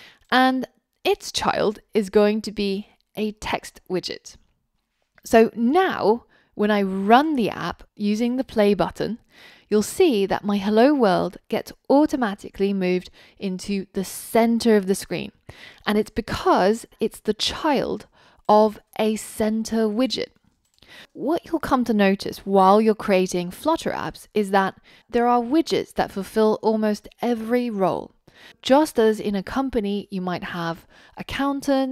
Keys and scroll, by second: 1.7 super+x, 3.2 super+v, 7.3 ctrl+r.